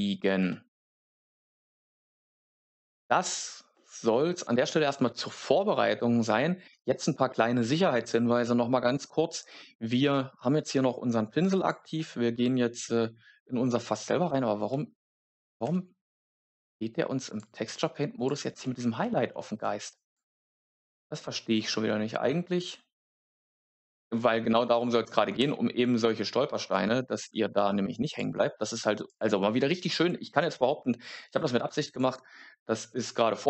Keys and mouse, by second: 3.6 shift+middle click, 11.4 click, 14.3 Tab, 14.6 middle click, 15.6 Tab, 17.2-18.3 drag, 25.3 Tab, 27.2 Tab, 28.0-29.1 drag, 31.7 click.